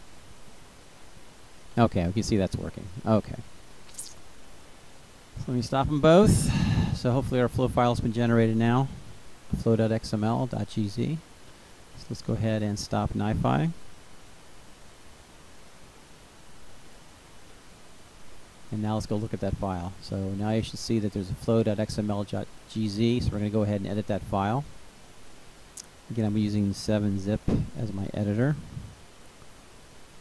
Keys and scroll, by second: 12.0 ctrl+c, 15.8 y, 16.2 Return.